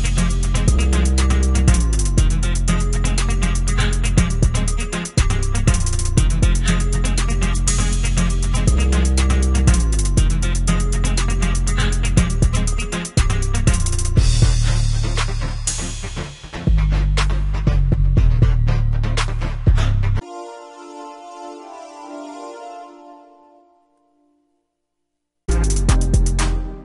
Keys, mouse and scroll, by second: 0.5 F1.